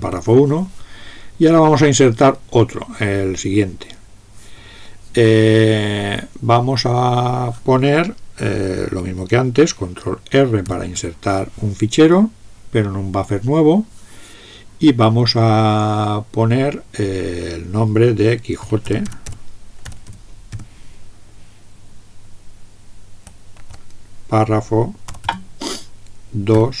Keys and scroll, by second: 0.0 alt+<, 10.7 ctrl+r, 18.4-20.7 typing, 23.6 typing, 25.1 typing, 26.5 2.